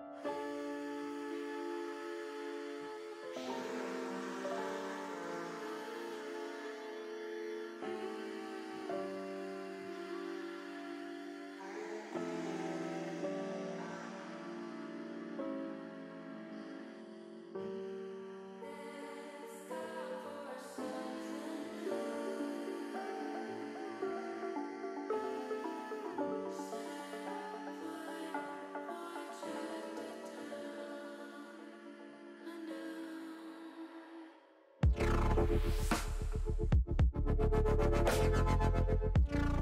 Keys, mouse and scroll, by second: 0.2 e, 2.2 click, 7.7 ctrl+r, 10.9 click, 12.1 ctrl+r, 13.7 click, 14.5 ctrl+r, 16.0 click, 17.1 ctrl+r, 18.9 click.